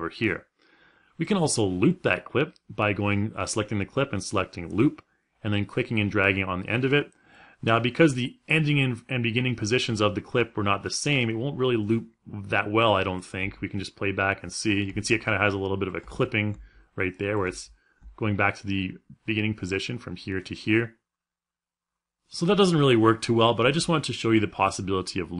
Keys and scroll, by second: 13.0 space.